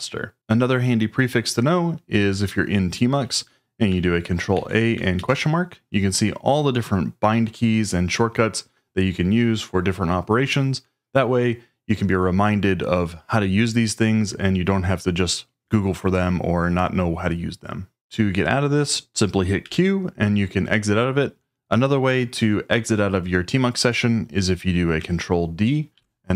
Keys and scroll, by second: 4.5 ctrl+a, 5.1 shift+/, 19.6 q, 25.9 ctrl+d.